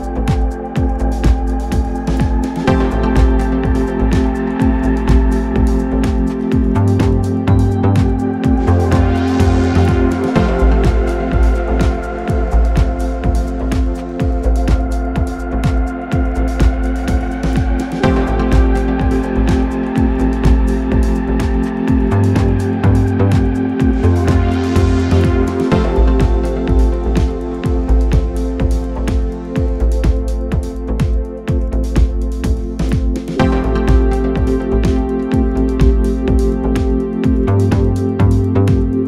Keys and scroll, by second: 0.4 2, 4.2 3, 4.4 4, 26.1 3, 26.8 Delete, 27.6 Delete, 28.1 4, 31.7 2.